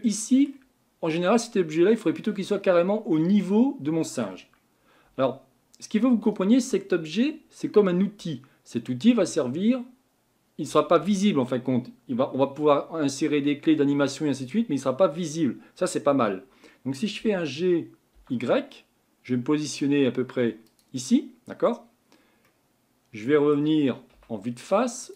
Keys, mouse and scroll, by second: 3.1-5.1 middle drag, 5.1 Tab, 17.2 g, 22.5-24.1 middle drag, 24.1 KP_1, 24.6-25.0 scroll up 3, 25.0 click.